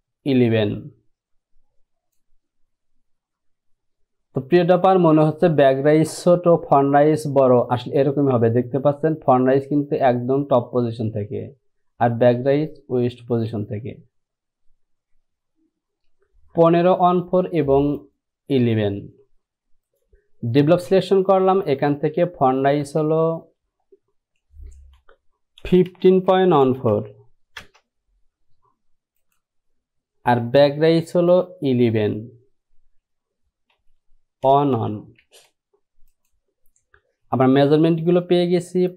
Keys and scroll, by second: 23.1 space, 25.8-27.7 typing, 29.1 typing, 33.8 Down, 34.6 KP_1, 34.9 KP_1, 35.3 Down.